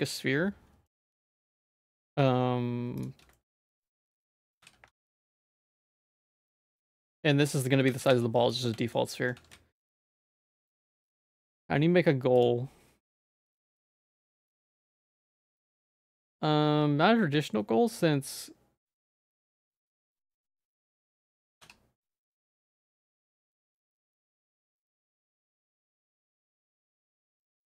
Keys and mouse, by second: 0.8 middle click, 1.1 shift+a, 3.3 middle click, 4.0 shift+middle click, 4.5 g, 5.3 g, 6.6 shift+middle click, 7.0 middle click, 7.8 g, 8.8 shift+click, 9.4 ctrl+s, 10.2 shift+a, 12.3-14.3 drag, 14.9 shift+a, 18.8 middle click, 19.5 middle click, 19.9 g, 20.6 middle click, 21.1 ctrl+z, 21.4 g, 23.0 middle click, 23.7 shift+middle click, 24.2 s.